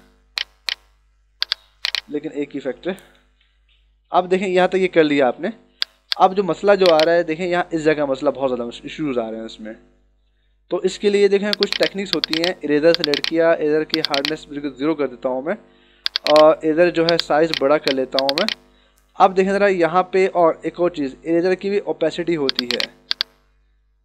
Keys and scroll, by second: 3.4 ctrl+=, 5.8 h, 10.4 e.